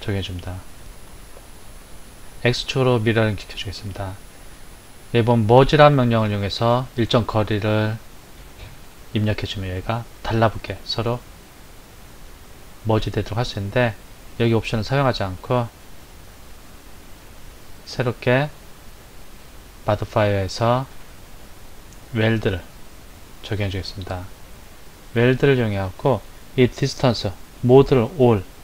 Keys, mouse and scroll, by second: 16.2 click, 19.2 click, 22.1 click, 27.9-28.6 drag.